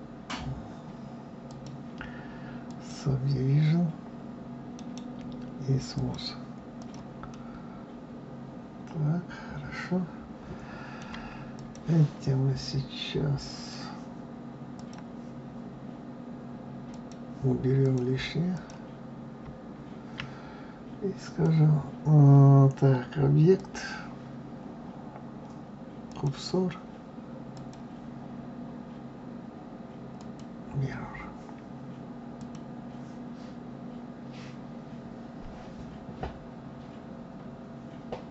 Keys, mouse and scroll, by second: 1.4-4.5 drag, 4.7-6.8 right drag, 6.8 click, 7.3-10.3 middle drag, 11.5 click, 13.5 click, 14.7 click, 16.9 click, 17.8 click, 18.5 click, 21.1-26.6 drag, 27.5-32.4 drag.